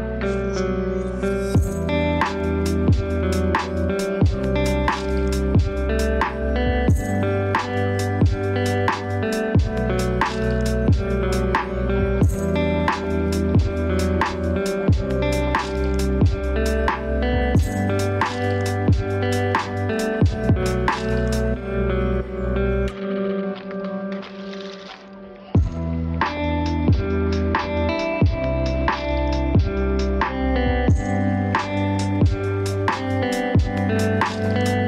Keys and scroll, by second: 4.7 ctrl+space, 22.4 ctrl+g, 29.1 ctrl+d, 29.6 ctrl+space, 30.7 ctrl+d, 31.4 ctrl+space, 32.6 ctrl+d, 33.7 ctrl+space.